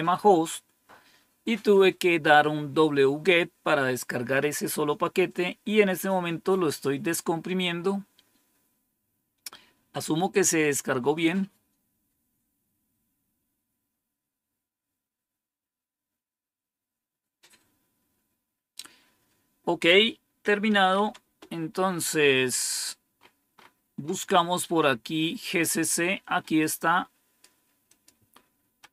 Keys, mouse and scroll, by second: 20.4-21.4 typing, 23.1 scroll up 2, 23.9 scroll up 2, 26.5-28.9 drag, 26.5 typing.